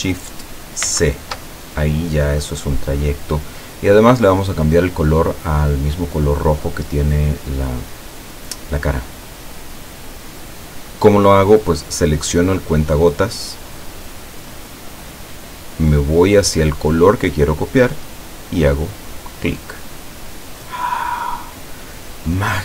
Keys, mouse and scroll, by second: 0.9 ctrl+shift+c, 14.1 click, 19.1 click.